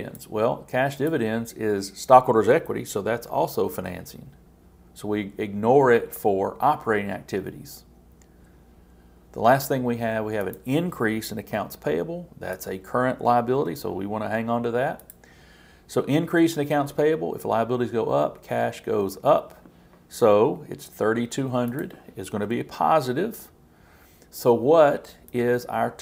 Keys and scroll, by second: 11.5 super+c, 13.5 super+v.